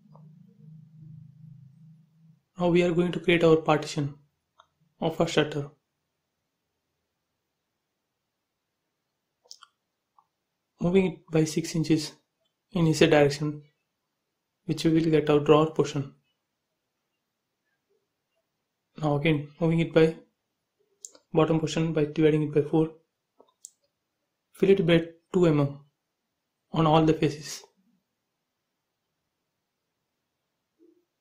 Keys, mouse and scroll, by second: 0.2 click, 1.8-3.2 middle drag, 3.2 click, 4.0 m, 6.1-7.0 typing, 7.5 click, 8.6 m, 9.3 ctrl+click, 10.0 space, 10.8 m, 11.4 ctrl+click, 12.4 Up, 12.8 6, 13.3 shift+', 13.5 Return, 13.8 space, 14.5 click, 15.9 m, 16.5 click, 17.5 click, 17.9-20.0 typing, 19.7 click, 20.5 click, 21.0-21.5 scroll up 1, 21.7 f, 22.1 click, 22.7-24.3 typing, 25.4 click, 25.8 click, 26.5 f, 26.7 click, 30.3 space, 30.8 click.